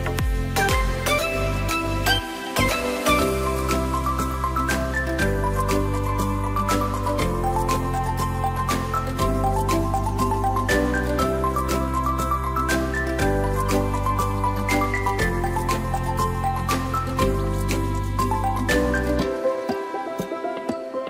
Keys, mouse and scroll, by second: 0.5 s, 3.8 click, 4.1-5.2 scroll down 2, 5.2-5.9 scroll up 2, 5.9 click, 6.5 shift+click, 7.2 shift+click, 8.3 shift+click, 8.9 shift+click, 9.6 e, 12.0 click, 12.8 click, 17.5 click, 19.5 click, 20.6 e.